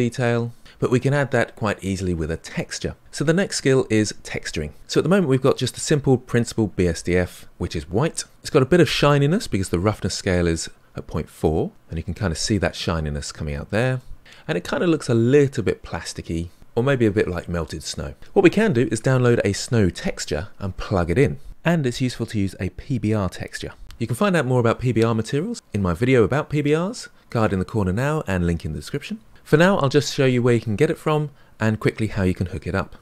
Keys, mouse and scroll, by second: 4.8-5.8 scroll down 2, 5.8-11.9 scroll down 1, 11.9-16.6 middle drag.